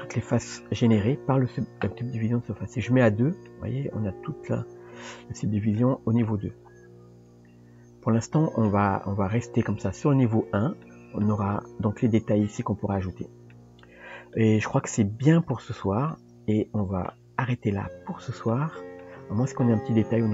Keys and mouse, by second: 2.8 click, 3.5-5.7 middle drag, 6.3-8.7 middle drag, 9.7 click, 10.8-11.3 middle drag, 13.6-14.3 middle drag, 14.9 Tab, 15.5 shift+middle click, 16.1 middle click, 18.5 middle click, 20.1 KP_3.